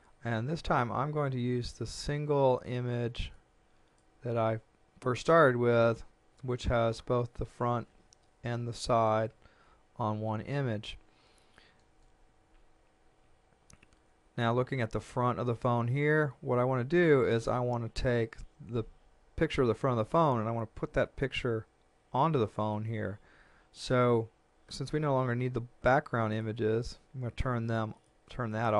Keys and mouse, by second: 2.5 click, 26.3 click.